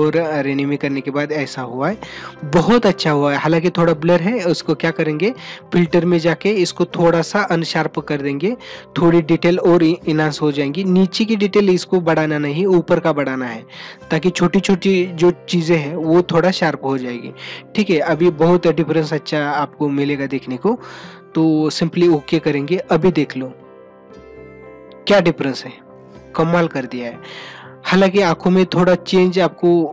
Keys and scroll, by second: 2.8 ctrl+-.